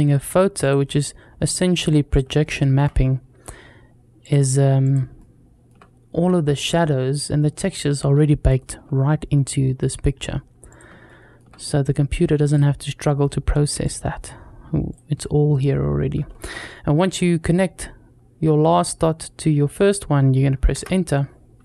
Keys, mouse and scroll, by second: 2.2 shift+middle click, 2.8-3.9 scroll up 1, 5.0 shift+middle click, 6.1 scroll down 1, 6.6 scroll down 1, 7.5 scroll up 3, 8.0 shift+middle click, 9.1-10.0 scroll up 2, 10.9 shift+middle click, 15.1-15.9 scroll down 1, 15.9-16.3 scroll down 1, 17.0-20.1 scroll up 2.